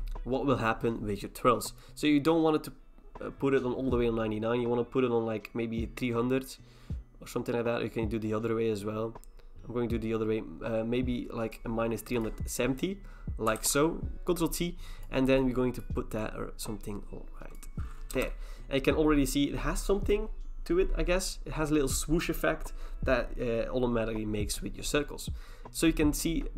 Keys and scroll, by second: 13.6 ctrl+t, 18.1 Return.